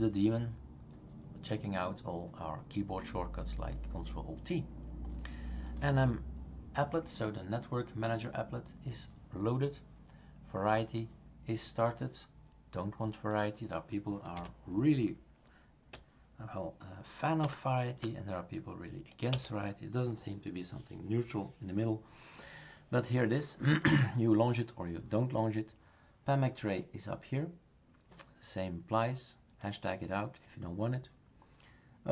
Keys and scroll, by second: 14.4 Left, 17.4 #, 19.3 BackSpace.